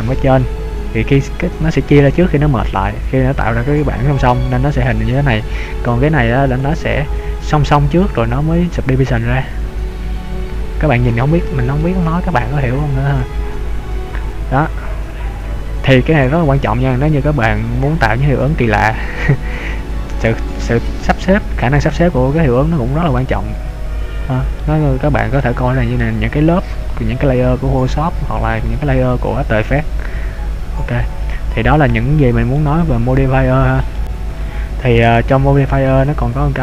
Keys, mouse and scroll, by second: 6.7 click, 8.7-9.3 scroll down 2, 9.3 middle click, 13.2 click, 13.8 scroll up 3, 14.6-16.5 scroll down 4, 16.6 click, 16.7-17.4 scroll down 3, 17.4 middle click, 17.4 scroll up 1, 23.2 middle click, 25.6 middle click, 31.3-31.9 scroll down 2, 31.9-32.7 scroll down 2, 32.7 middle click, 34.7-35.3 scroll up 4, 36.4 click.